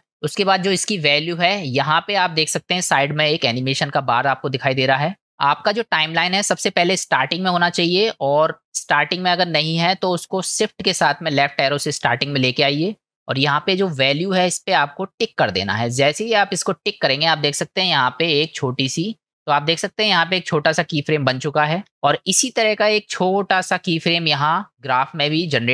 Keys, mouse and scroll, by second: 6.1 click, 9.5-10.1 drag, 11.4 shift+Left, 16.2-19.3 drag.